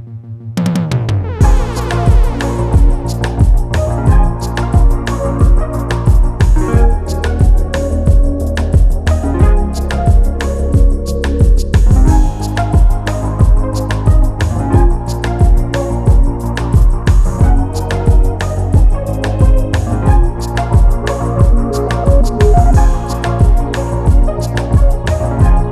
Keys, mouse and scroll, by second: 0.0-1.0 scroll down 3, 1.0-4.2 scroll up 1, 4.2-6.7 drag, 10.3-10.8 drag, 11.8-13.2 scroll down 2, 13.2 click, 15.7-16.9 drag, 18.2 scroll up 6, 18.8 scroll down 4, 20.1-22.5 drag.